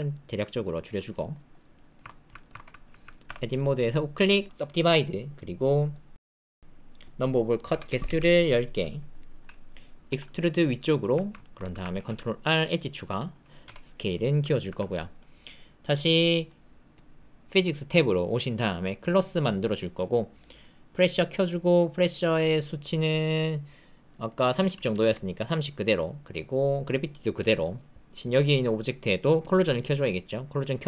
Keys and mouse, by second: 0.5 s, 1.3 shift+click, 1.7 shift+middle click, 2.0 ctrl+middle click, 2.3 shift+middle click, 2.5 ctrl+middle click, 3.2 Tab, 3.6 click, 7.2-8.2 drag, 9.5 middle click, 10.0 e, 11.1 ctrl+middle click, 11.4 shift+middle click, 11.9 ctrl+r, 13.6 s, 14.6 Tab, 19.5 click, 20.0 click, 20.4 click, 21.3 middle click, 22.0-25.0 drag.